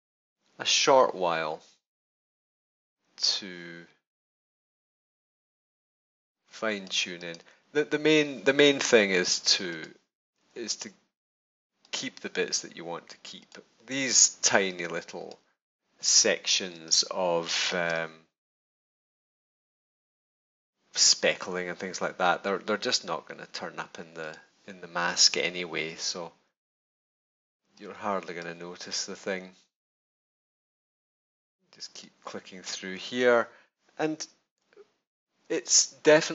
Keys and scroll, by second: 16.7 space, 34.5 super+-.